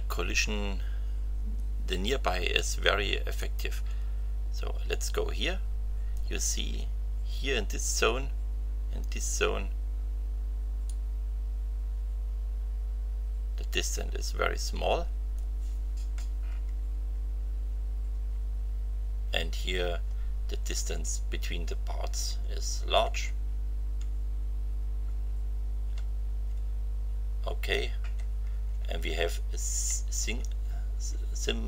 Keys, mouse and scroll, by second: 3.4-6.3 drag, 10.8-15.5 drag, 16.9 Right, 18.1 Right, 19.0 Right, 22.1 Right, 24.4 Left, 25.8 Right, 26.4 Right, 30.9 Right.